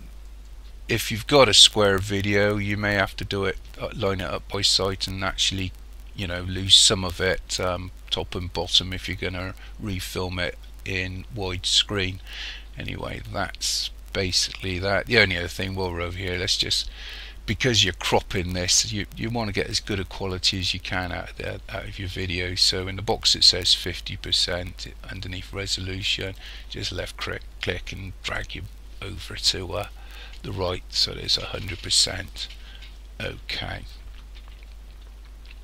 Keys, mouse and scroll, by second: 26.4 click.